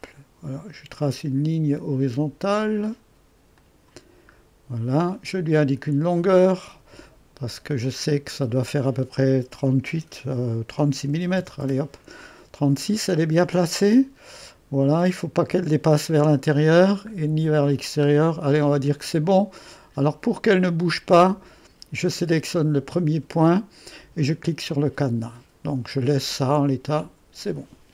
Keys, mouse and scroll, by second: 0.0-3.2 drag, 3.6-10.8 drag, 10.8-11.2 typing, 11.4 Return, 21.4-22.1 typing, 22.3-27.0 drag.